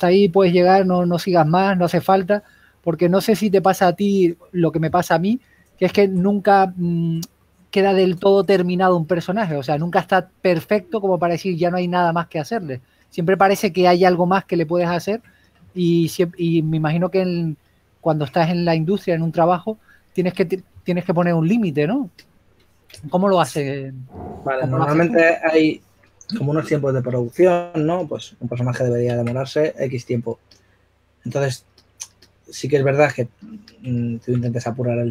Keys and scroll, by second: 11.7-12.9 typing, 14.2 typing, 17.0 s, 18.4 typing, 20.7 typing, 22.9-25.5 typing, 23.8 super+z.